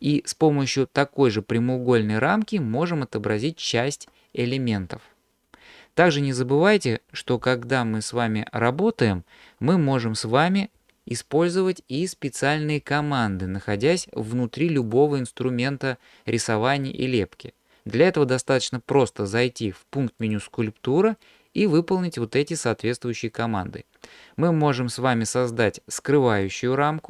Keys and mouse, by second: 0.7-3.4 ctrl+drag, 7.5 ctrl+z, 10.9 alt+h, 20.3-27.0 drag.